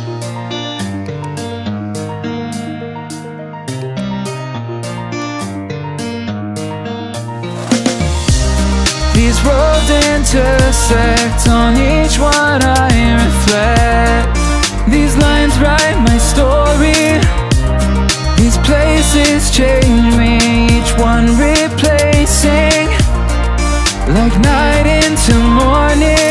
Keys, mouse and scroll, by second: 2.1 s, 3.8 click, 5.2-10.7 drag, 11.3-14.0 drag, 14.0 right click, 15.0 click, 16.8 right click, 18.1 right click, 20.8 right click, 22.4 shift+d, 23.6-26.3 drag.